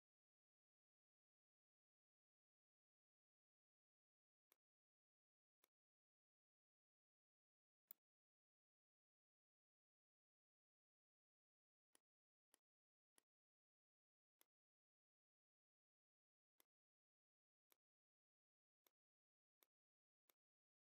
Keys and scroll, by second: 1.5 Down, 2.0 Down, 2.5 Down, 3.9 v, 7.1 m, 10.9 v, 12.4 space, 16.5 space.